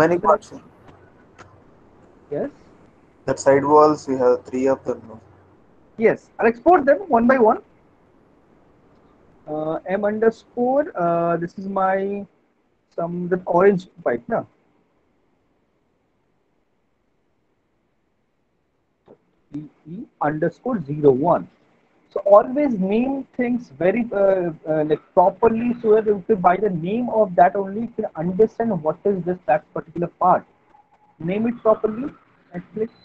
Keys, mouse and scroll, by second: 0.0 click, 2.0 click, 3.5 click, 5.8 click, 8.4 click, 14.9-17.9 typing, 15.1 click, 19.3-21.8 typing, 30.5 click, 31.5 alt+middle click, 31.9 right click.